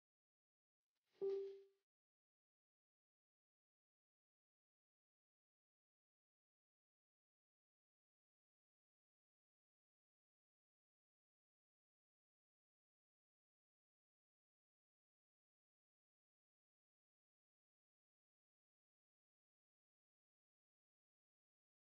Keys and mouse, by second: 3.1 z, 3.7 z, 6.4 click, 7.2-12.0 right drag, 12.0-19.5 drag, 19.7 click.